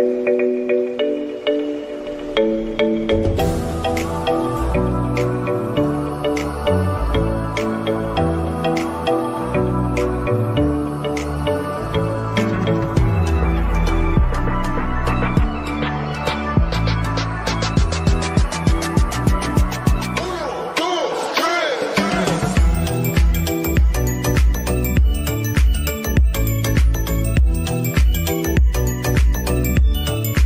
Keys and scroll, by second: 16.4 shift+Page_Down, 22.0 ctrl+v.